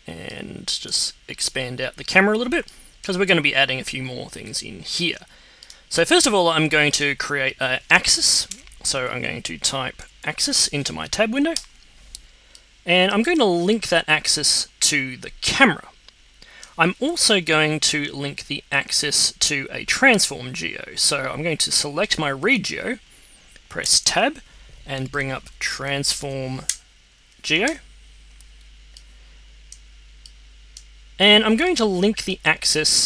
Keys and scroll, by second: 8.5 Tab, 9.7-10.9 typing, 23.8 Tab, 24.8-26.7 typing, 26.9 Down, 27.6 Return.